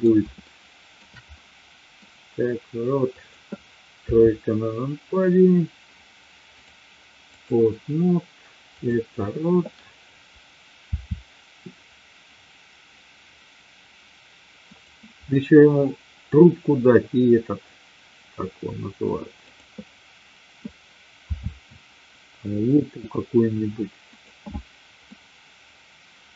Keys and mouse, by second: 0.4-1.0 shift+middle drag, 1.2-2.0 middle drag, 3.1 click, 4.0 KP_3, 6.4-7.5 drag, 8.8 click, 10.9 r, 19.4-20.4 drag, 21.2 r, 25.0-26.3 middle drag.